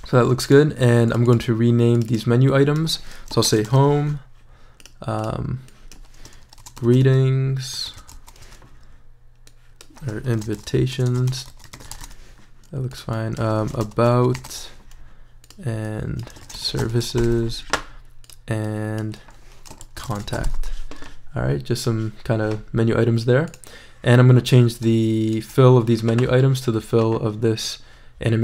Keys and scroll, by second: 3.2-4.2 typing, 6.4-8.9 typing, 10.1-15.0 typing, 16.2-18.1 typing, 19.6-21.0 typing.